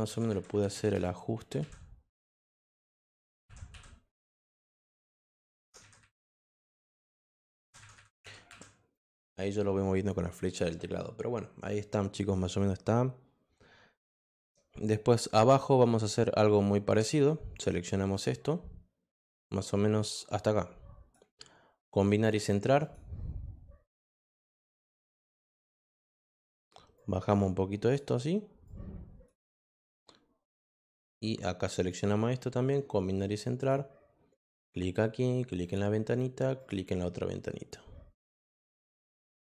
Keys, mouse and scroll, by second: 2.5 click, 4.3 click, 5.3 click, 7.2 click, 8.9 click, 17.5-21.1 drag, 22.8 click, 26.9-27.9 drag, 28.6 click, 30.7-31.8 drag, 33.5 click, 34.6 click, 35.6 click.